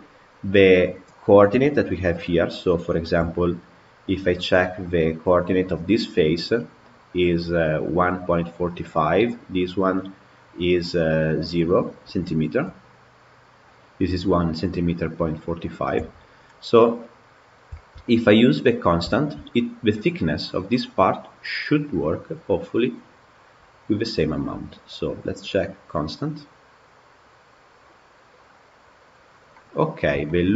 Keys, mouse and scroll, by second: 0.7 click, 1.4 KP_Decimal, 2.1-3.1 middle drag, 3.1 Tab, 3.9 click, 5.5 click, 9.0 click, 12.7 click, 15.8 Tab, 16.2-16.7 scroll down 10, 17.6-18.1 shift+middle drag, 18.1 click, 18.7 scroll up 2, 19.0-21.7 shift+middle drag, 21.7-22.5 scroll down 10, 28.6 click, 29.4 middle click, 29.7-30.1 scroll down 3, 30.1 shift+middle click.